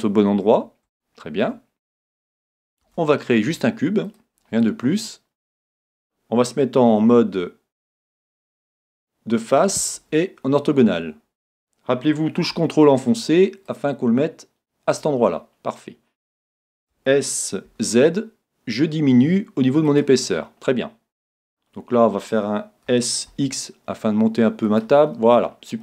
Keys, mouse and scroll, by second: 2.8 shift+a, 4.8-6.9 middle drag, 7.0 KP_1, 8.2 KP_1, 10.0 KP_5, 11.1-13.2 scroll up 1, 13.2 scroll up 1, 13.7-15.7 drag, 15.3 scroll down 1, 15.5-17.4 middle drag, 16.9 s, 20.0-21.7 drag, 21.0-22.9 middle drag, 22.9 s, 23.4 middle click, 24.8-25.8 drag, 25.1-25.8 middle drag.